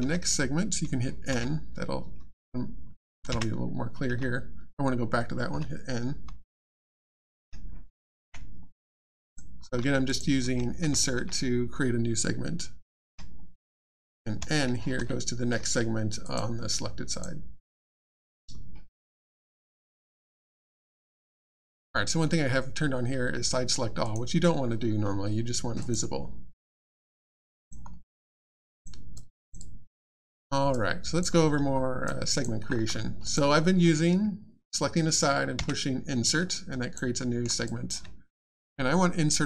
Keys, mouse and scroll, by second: 9.1 alt+click, 10.1 click, 10.1 click, 10.4 alt+x, 16.2 click, 18.1 click, 19.1 alt+click, 19.7 alt+middle click, 20.4 alt+scroll up 1, 20.7 alt+click, 24.0 click, 25.8 click, 27.3 alt+click, 27.9 alt+middle click, 28.4 alt+click, 29.6 alt+click, 30.2 alt+middle click, 30.4 alt+scroll down 1, 30.7 alt+click, 31.7-32.0 alt+scroll down 1, 32.0 alt+click, 32.6 alt+scroll up 2, 33.2 click, 36.5 alt+click, 37.2 alt+middle click, 37.6 alt+click.